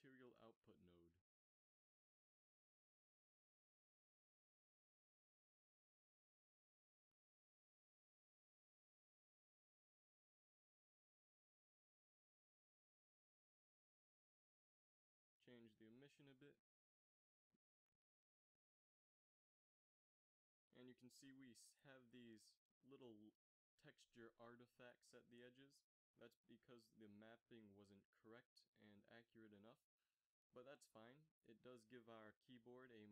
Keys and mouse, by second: 1.5 f, 2.4 a, 13.2 z, 13.3 z, 17.2 shift+z.